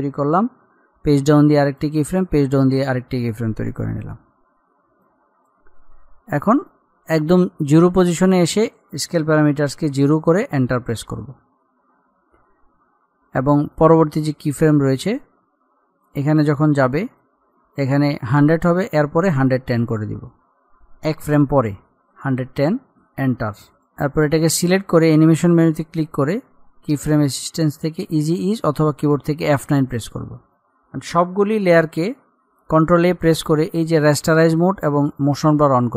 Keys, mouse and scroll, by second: 1.1 Page_Down, 1.9 click, 2.4 Page_Down, 2.8 click, 4.3-4.8 alt+scroll up 1, 5.2-10.8 drag, 14.0-18.6 drag, 18.6-21.1 drag, 22.3 BackSpace, 24.0-27.5 drag, 28.6 click, 31.2-33.0 drag, 33.0 ctrl+a, 34.5 click.